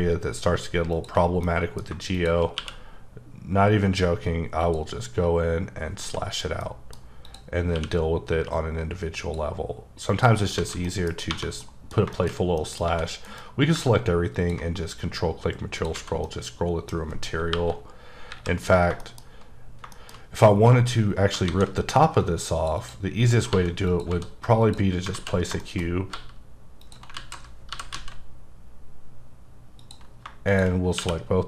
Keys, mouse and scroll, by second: 1.0 click, 1.2 scroll down 2, 1.5 middle click, 2.2 shift+click, 2.6 q, 4.6 click, 6.0 h, 6.4 scroll down 1, 6.6 middle click, 7.3 click, 7.5 scroll up 2, 7.7 q, 8.5 click, 10.1 click, 10.4 scroll down 2, 10.6 alt+a, 10.9 middle click, 11.1 scroll down 1, 11.3 1, 11.6 middle click, 12.3 shift+scroll down 2, 12.6 middle click, 12.9 a, 13.3 alt+m, 14.4 ctrl+click, 14.8-15.8 scroll up 3, 15.9 alt+a, 16.3 middle click, 17.5 KP_1, 18.3 KP_3, 18.9 shift+KP_3, 19.0 shift+middle click, 19.2-19.7 shift+scroll up 3, 19.9 shift+middle click, 21.5 shift+a, 22.2 click, 22.8 double click, 23.3 scroll down 3, 23.5 g, 23.9 click, 24.1 s, 24.6 click, 25.1 alt+z, 25.5-25.9 scroll up 4, 25.6 shift+middle click, 26.1 g, 26.8 click, 27.2-27.7 alt+scroll up 3, 27.7 g, 28.0 z, 29.8 click, 30.2 scroll down 3, 30.5 shift+click, 30.8 scroll down 2, 31.0 q.